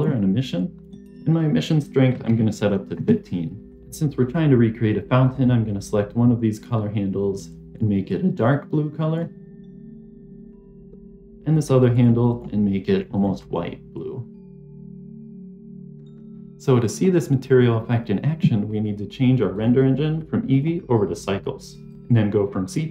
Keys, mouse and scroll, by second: 0.7-3.0 drag, 3.7 click, 5.1 click, 11.0 click, 11.4 click, 12.2 click, 13.1 click, 16.1 click, 19.5 click, 20.4-21.9 drag, 22.6-22.9 drag.